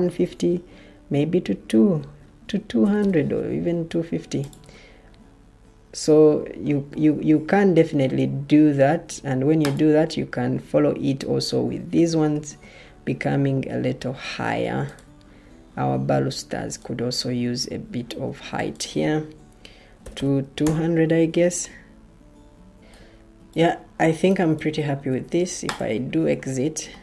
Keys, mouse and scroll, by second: 1.9-2.9 typing, 8.7 Escape, 12.2 ctrl+t, 19.9 typing, 20.5 Return.